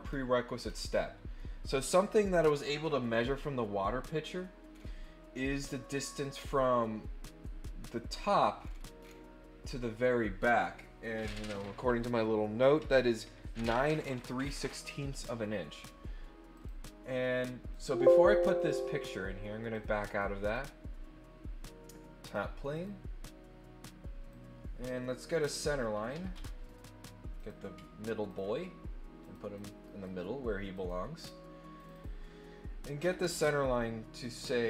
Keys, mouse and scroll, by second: 0.1 scroll down 2, 0.6-0.9 scroll down 4, 1.3 scroll up 2, 4.7 scroll up 1, 8.6 scroll up 1, 9.0 scroll down 2, 16.5 click, 17.7 click, 18.5 click, 19.7 click, 20.0 click, 20.5 click, 22.2 click, 22.7 click, 24.3-25.5 drag, 26.3 Escape, 26.7 right click, 27.3 click, 28.2 ctrl+click, 29.2 click, 29.5 click, 29.8 right click, 30.7 click, 31.2 click, 31.8 click, 31.9 click.